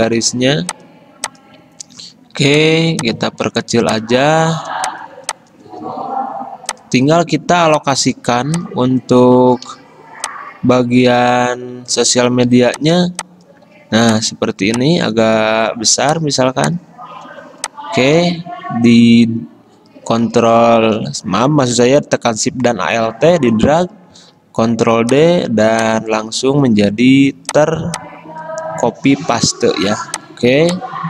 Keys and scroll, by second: 5.0 i, 11.9 x, 12.7 v, 24.7 ctrl+d, 30.0 ctrl+g.